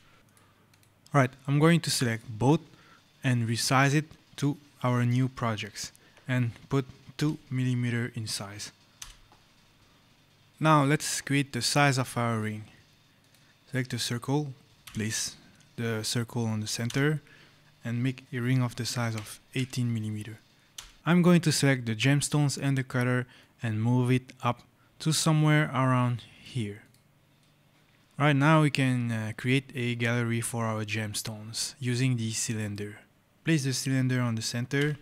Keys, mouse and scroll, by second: 0.2 click, 3.2 click, 7.0 2, 8.8 Return, 11.6-12.0 scroll, 12.0 right click, 13.0 click, 14.7 KP_0, 16.7 Return, 19.0 KP_1, 19.4 KP_8, 20.6 Return, 21.0 click, 21.5 click, 23.2 click, 26.7 click, 27.2 right click, 27.7 click, 32.5 click, 34.6 KP_0.